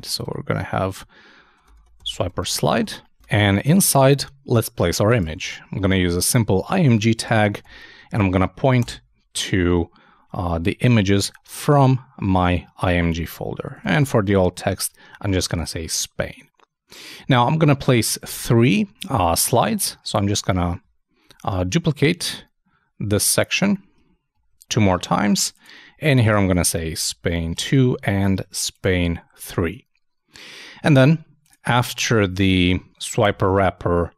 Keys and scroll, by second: 13.3-14.2 typing, 20.1 shift+super+Down, 24.3 shift+Down, 33.2 super+Return.